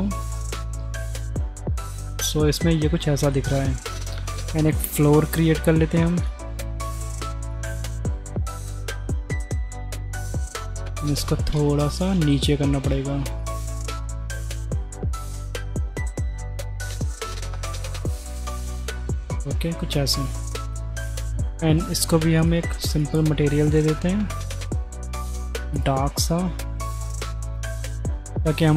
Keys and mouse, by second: 3.4 middle click, 4.0 shift+click, 4.3 click, 4.7 shift+a, 6.3-6.6 drag, 7.1 s, 7.9 s, 10.3 click, 11.3 drag, 12.7 g, 16.1 g, 17.6 g, 19.2 click, 21.3-21.8 drag, 22.4-23.1 drag, 24.6 middle click, 25.0 drag, 25.8 click.